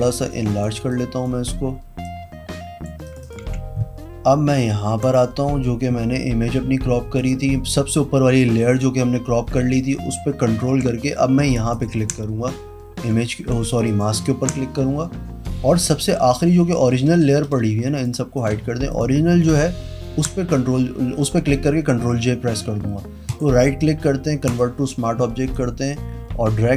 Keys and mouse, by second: 0.8 click, 2.0 click, 3.0 click, 3.4 v, 5.0 click, 7.1 click, 11.7 ctrl+click, 13.8 ctrl+click, 17.4 click, 17.9 click, 18.3 click, 18.8 click, 19.8 ctrl+j, 23.2 right click, 24.4 click, 25.5 click.